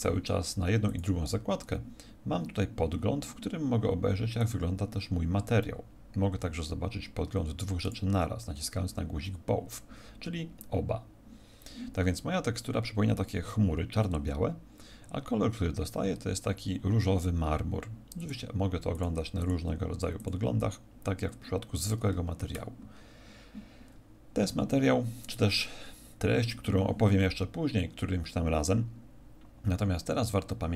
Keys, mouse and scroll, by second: 0.8 click, 4.4 click, 7.8 click, 18.1 click, 18.9 click.